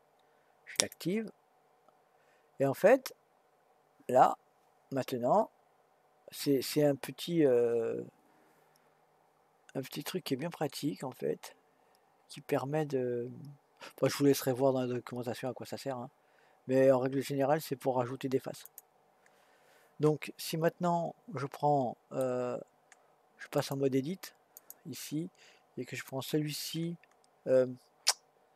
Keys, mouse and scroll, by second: 18.6 click, 20.2-23.2 middle drag, 23.6-26.3 drag.